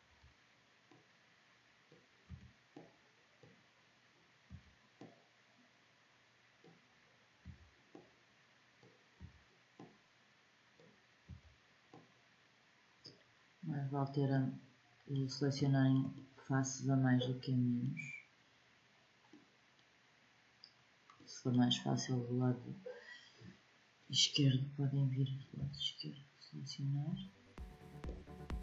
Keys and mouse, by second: 2.0 b, 4.2 b, 7.2 b, 8.9 b, 11.0 b, 13.7-16.0 drag, 25.3 b.